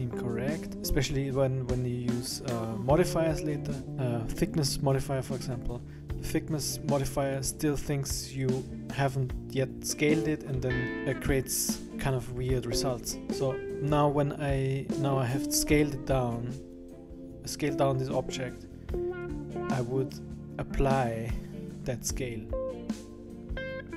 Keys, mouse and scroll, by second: 19.2 click.